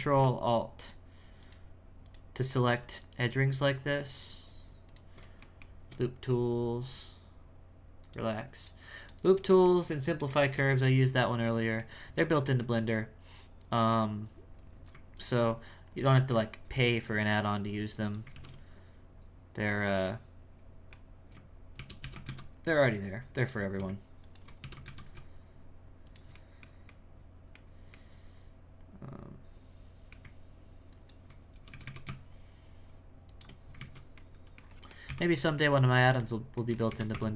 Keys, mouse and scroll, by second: 0.8 ctrl+alt+shift+right click, 1.4 ctrl+alt+shift+right click, 2.0 ctrl+alt+shift+right click, 2.6 ctrl+alt+shift+right click, 3.2 ctrl+alt+shift+right click, 4.2 ctrl+alt+shift+right click, 5.4-8.0 shift+middle drag, 8.0-9.6 drag, 9.6-10.7 shift+middle drag, 10.7-11.4 scroll down 4, 11.6 middle click, 12.0 scroll up 1, 12.3 alt+middle click, 12.7-14.3 middle drag, 14.3-15.1 scroll up 2, 15.1 alt+right click, 20.1-21.7 middle drag, 24.2 right click, 26.3-27.6 middle drag, 27.9-30.9 middle drag, 30.9 right click, 33.5 scroll down 5, 33.8 alt+a, 34.1 middle click, 35.0 KP_1, 35.7-36.5 scroll down 7, 36.5 shift+middle click, 36.9 alt+a, 37.1 Tab.